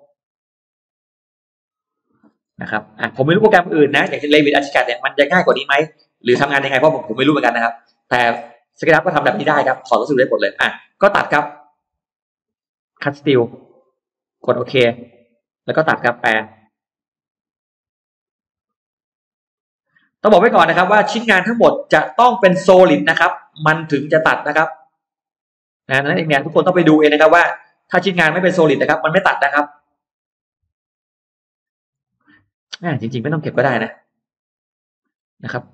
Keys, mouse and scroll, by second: 1.8 click, 2.0 middle click, 3.5 click, 3.9 space, 4.2 click, 4.8 click, 5.4 g, 5.6-5.9 scroll down 1, 5.9 click, 6.2 middle click, 6.4-6.7 scroll down 1, 6.8-8.7 middle drag, 9.0 scroll up 1, 9.4 middle click, 10.4 middle click, 12.8 click, 14.0 click, 14.8 click, 15.4 middle click, 15.8 middle click, 16.2 middle click, 17.0 click, 17.8 click, 18.8 click, 19.3 click, 19.6 middle click, 19.6-20.0 scroll down 1, 20.4-20.7 scroll up 1, 21.1 click, 21.6 click, 21.8 scroll down 1, 22.8 click, 23.3 click, 23.7-24.0 scroll down 2, 24.2-24.8 scroll up 2, 25.0 click, 25.5 click, 26.2 click, 26.8 click, 27.2-27.8 scroll down 1, 27.8-28.2 scroll up 1, 28.2 middle click, 28.2 scroll down 1, 28.6 middle click, 29.0 middle click, 30.6 click, 31.2 click, 31.8 click, 32.5 click, 33.4 click, 34.1 click, 34.6 click, 34.9-35.2 scroll down 1, 35.4-35.7 scroll up 2.